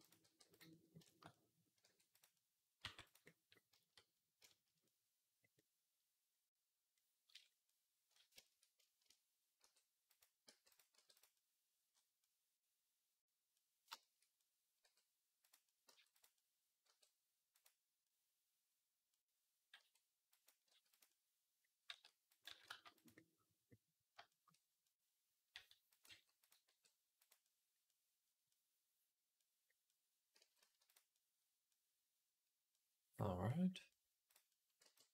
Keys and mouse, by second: 0.1 r, 1.7 r, 2.7 r, 4.8-14.6 middle drag, 9.5 r, 10.3 g, 10.8 r, 14.6-16.4 drag, 14.7 r, 15.7 g, 16.7 r, 19.6 g, 20.5 r, 20.9-24.3 drag, 21.7 s, 22.3 s, 24.3-27.5 middle drag, 25.4 r, 25.9 g, 26.5 r, 27.7 click, 28.3 click, 28.9-35.1 drag, 30.2 g, 34.7 b.